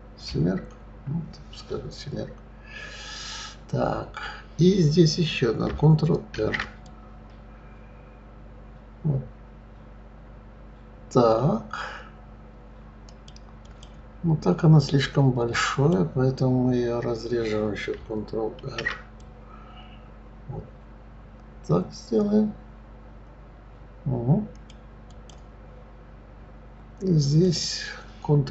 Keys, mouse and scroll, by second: 0.2 KP_7, 6.4 ctrl+r, 15.7 click, 18.6 ctrl+r, 25.1 click, 27.4 click.